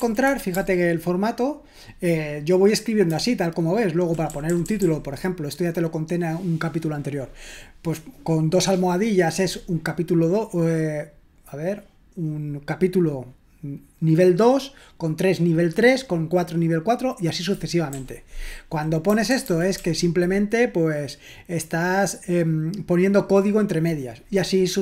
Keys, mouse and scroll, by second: 0.0 ctrl+u, 0.0-0.7 typing, 0.2 ctrl+u, 0.5 ctrl+u, 3.1-5.2 typing, 17.9-20.2 typing.